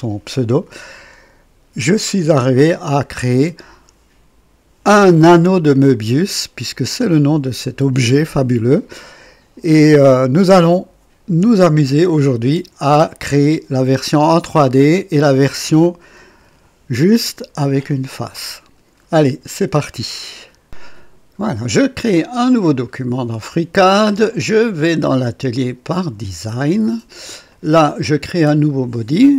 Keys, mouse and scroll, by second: 20.7 click, 22.8 click, 24.3 click, 25.9 click, 27.5 click, 28.6 click.